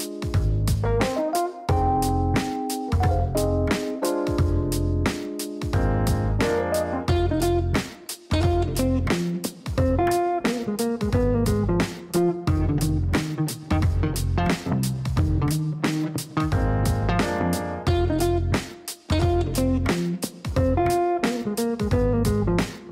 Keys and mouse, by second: 0.0 shift+-, 1.1 t, 2.0 BackSpace, 2.6 shift+t, 3.5 2, 4.9 click, 5.0 click, 5.2 click, 7.7 KP_5, 9.1 KP_Enter, 12.0 click, 12.2 click, 13.4 click, 14.8 click.